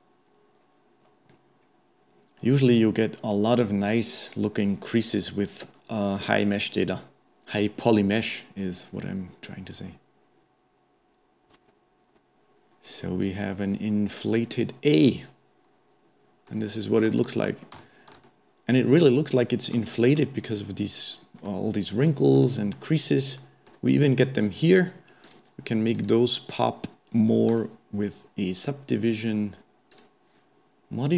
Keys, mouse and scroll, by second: 11.8-13.6 middle drag, 17.0-17.5 scroll up 1, 17.5-17.8 scroll down 1, 17.8-25.2 shift+middle drag, 25.2 click, 26.0-29.0 drag, 29.9-31.0 drag.